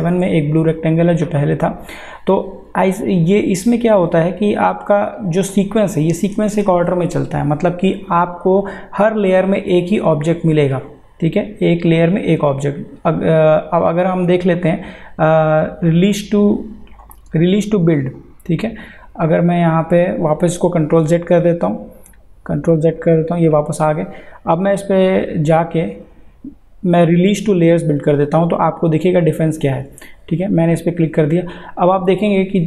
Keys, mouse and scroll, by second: 4.0 click, 9.3 click, 21.0 ctrl+z, 24.5 click, 29.8 click.